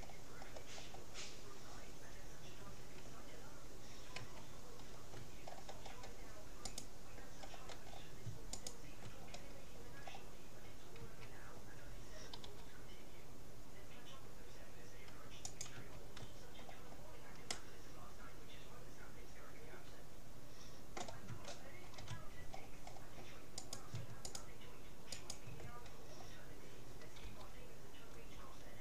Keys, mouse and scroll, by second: 1.4-2.4 scroll up 1, 2.4 middle click, 4.2 a, 4.6-5.6 middle drag, 5.6-6.6 scroll down 1, 6.6 scroll up 1, 6.8-8.4 right drag, 8.6-9.8 right drag, 9.8 click, 10.0 right click, 10.2-12.0 middle drag, 11.0 a, 12.4 g, 15.8 a, 16.6-19.2 middle drag, 21.6-22.9 middle drag, 23.6-27.0 right drag, 27.2 g.